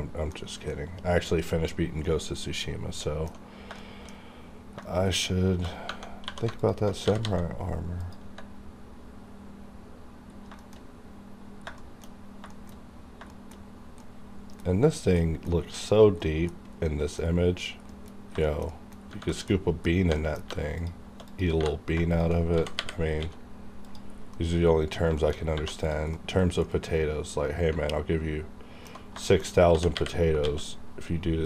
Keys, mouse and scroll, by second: 0.4 scroll up 1, 0.7 middle click, 1.7-2.0 scroll down 1, 2.0-3.8 middle drag, 3.8 shift+middle click, 4.8 shift+middle click, 5.7 shift+scroll up 1, 5.9 Tab, 6.2 2, 6.6 alt+click, 7.0 g, 8.0 click, 8.2 Tab, 9.8-10.1 scroll up 1, 10.5 scroll down 1, 10.6 shift+middle click, 10.8-11.5 shift+scroll up 2, 11.6 scroll, 11.8 shift+middle click, 12.2 scroll down 2, 12.5 shift+middle click, 12.5 shift+middle click, 13.3 shift+middle click, 15.7 scroll up 1, 16.2 middle click, 18.1 scroll up 1, 18.4 shift+middle click, 19.0-19.7 scroll up 3, 19.3 shift+middle click, 20.1 3, 20.2 middle click, 20.5 3, 20.8 click, 21.3 click, 21.5 3, 22.1 shift+click, 22.1 shift+click, 22.4 g, 23.2 x, 23.8 click, 24.1 scroll down 1, 24.3 middle click, 25.4 shift+scroll up 1, 25.5 1, 25.9 click, 26.1-29.2 middle drag, 29.4 shift+scroll up 2, 29.6 g, 30.3 x.